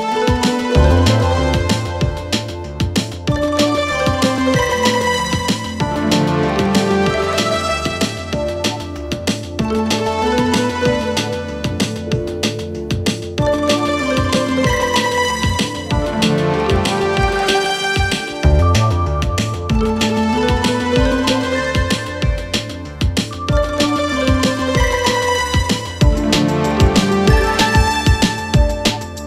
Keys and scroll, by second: 15.0 Escape, 27.9 ctrl+v.